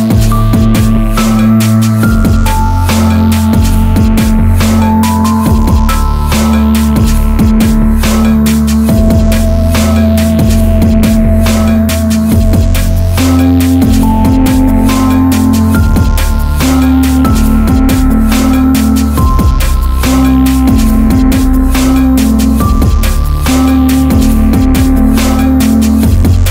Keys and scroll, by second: 6.0 ctrl+z, 6.7 ctrl+alt+z, 18.9 Down.